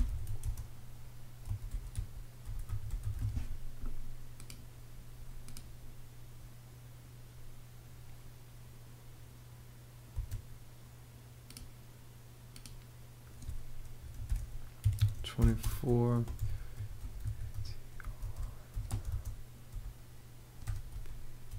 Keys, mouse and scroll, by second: 0.0-3.3 typing, 9.7 space, 13.8-21.5 typing.